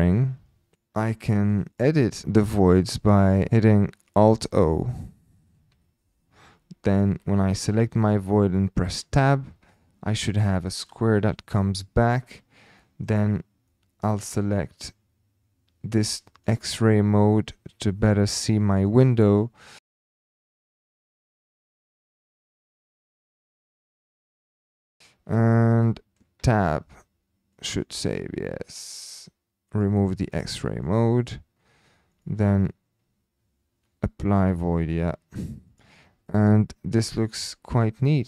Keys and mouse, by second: 1.0 click, 1.3 shift+drag, 1.7 click, 2.5 click, 3.5 Tab, 5.7 alt+o, 6.0 typing, 6.9 click, 9.0 Tab, 9.7 middle click, 11.1 KP_3, 12.8 shift+middle click, 13.7 middle click, 16.3 click, 18.4 shift+middle click, 19.3 click, 19.6 click, 20.0 shift+middle click, 20.3-24.5 typing, 20.7 click, 20.8 click, 21.0 click, 21.5 click, 22.3 click, 22.9 click, 24.8 click, 25.8 middle click, 26.4 Tab, 29.6 click, 30.8 middle click, 31.1 click, 32.2 click, 34.6 click, 35.7 click, 36.2-36.7 middle drag, 37.1 click, 37.4 middle click, 38.2 middle click.